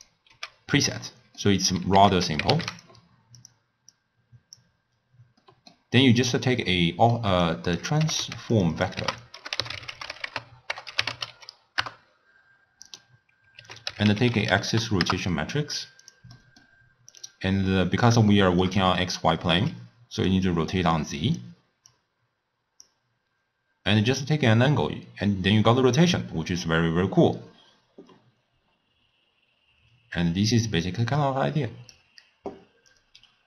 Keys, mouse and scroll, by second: 0.6 x, 1.0 scroll down 1, 1.1-2.0 middle drag, 2.0 ctrl+a, 4.0 click, 5.4-7.5 middle drag, 7.5 click, 8.1 g, 8.8 click, 9.0 ctrl+a, 13.6 ctrl+a, 16.4-17.4 middle drag, 17.4 click, 18.3-18.9 shift+middle drag, 18.9-19.7 d, 20.3-27.0 drag, 32.8 scroll up 1, 33.0-33.4 scroll down 8.